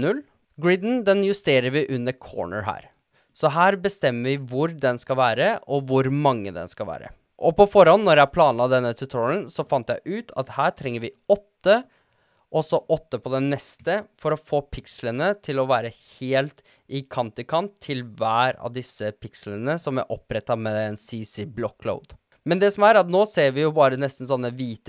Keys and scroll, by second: 9.7 8, 12.8 8, 13.8 Return.